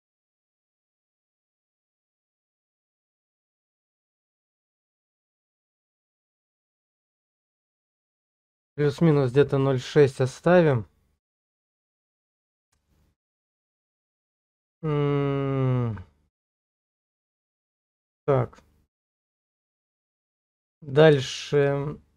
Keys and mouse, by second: 8.8-10.3 drag, 13.2 click, 14.1-17.5 drag, 19.5 shift+click, 20.6 shift+click, 21.4 shift+click, 21.9-22.1 drag.